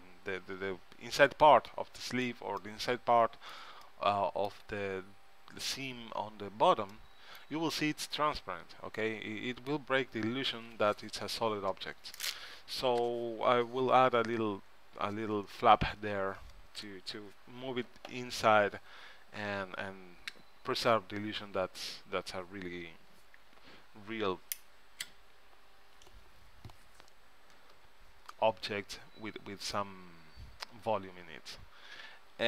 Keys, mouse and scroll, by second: 2.8 middle click, 9.4 middle click, 29.1-30.8 middle drag, 31.6-32.4 scroll up 1.